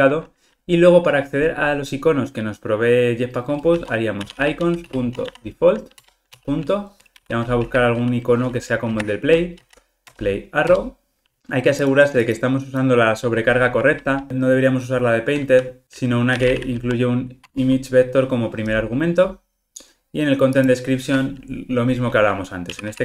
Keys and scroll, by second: 6.0 Return, 13.6 super+p, 17.5 Tab.